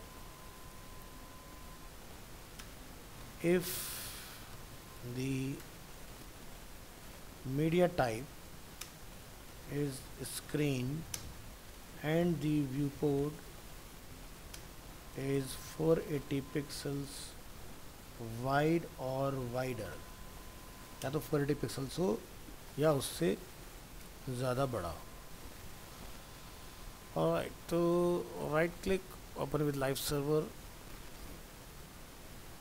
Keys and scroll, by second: 0.9 ctrl+Left, 24.7 ctrl+s.